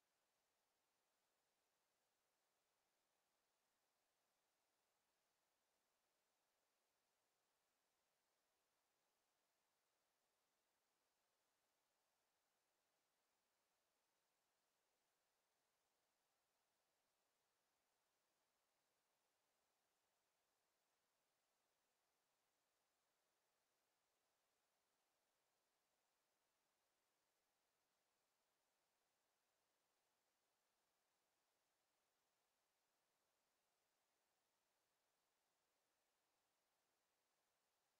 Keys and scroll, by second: 4.7 ctrl+z, 25.2 Delete.